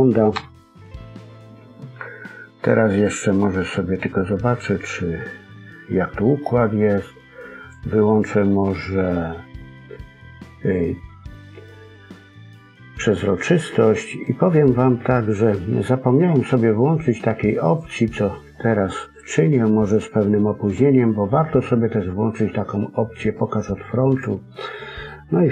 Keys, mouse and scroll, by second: 0.3 KP_1, 2.2 middle click, 7.6 click, 8.1 middle click, 17.6 click, 24.0 click, 24.8-25.5 scroll down 3, 25.0 middle click.